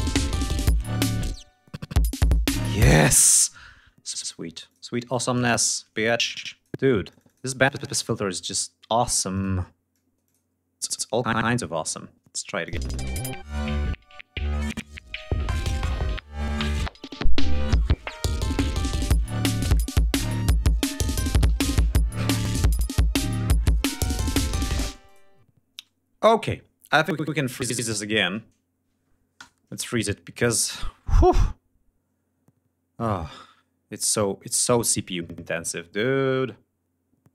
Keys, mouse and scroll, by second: 0.6 space, 1.4 space, 1.5 click, 2.1 space, 3.4 click, 3.9 click, 4.3 click, 4.7 shift+right click, 5.3 shift+click, 6.2 click, 6.8 click, 7.3-9.1 drag, 9.4 click, 10.6 click, 12.2 click, 12.7 space, 13.3 ctrl+scroll up 2, 14.2 ctrl+scroll down 2, 19.3 ctrl+scroll down 2, 20.0-20.3 ctrl+scroll down 3, 20.9 g, 21.2-21.5 scroll down 2, 21.8-22.6 scroll down 4, 22.9 ctrl+scroll up 2, 23.6 ctrl+scroll down 2, 24.2 space, 24.3 click, 26.4 scroll up 2, 27.0 click, 27.7-28.2 scroll up 4, 29.2 shift+right click, 30.1 click, 30.5 click, 32.8 click.